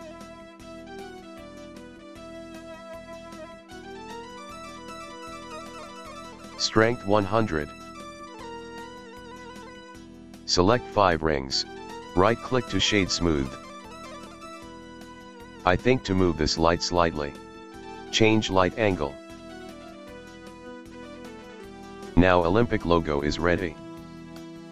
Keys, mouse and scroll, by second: 0.7-5.6 middle drag, 5.6-7.0 drag, 7.0 KP_0, 9.2 click, 9.8 drag, 11.9-14.3 right drag, 14.3 KP_1, 15.1 g, 15.5 click, 16.3 g, 18.3 click, 20.4-21.8 middle drag, 21.8-23.1 scroll up 1, 23.1-24.7 middle drag.